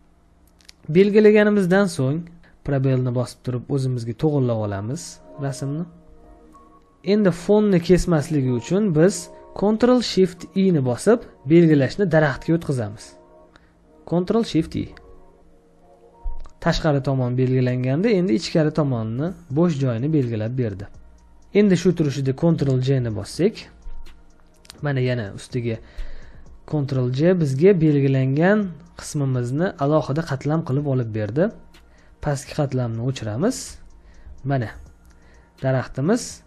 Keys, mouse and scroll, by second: 2.9 space, 15.0 ctrl+shift+i, 21.1 space, 22.9 ctrl+j, 34.6 space, 34.9 ctrl+click.